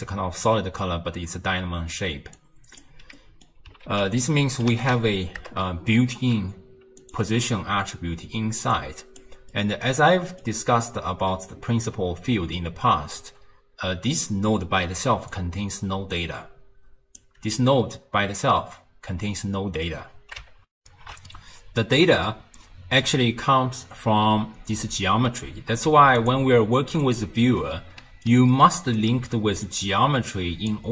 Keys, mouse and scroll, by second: 2.4 click, 3.2-3.9 middle drag, 3.9 ctrl+a, 8.8 click, 9.5-12.6 middle drag, 15.0 d, 15.3-17.2 drag, 17.2 d, 20.8 ctrl+alt+shift+w, 26.2 ctrl+shift+click, 27.1 ctrl+shift+click, 28.0 d, 28.3 right click, 29.0 d, 29.7 click.